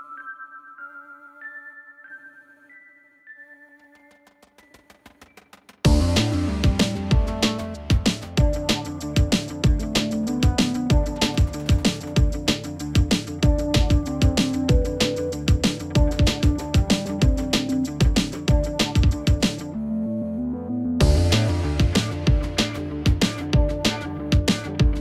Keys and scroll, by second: 11.0-12.2 typing.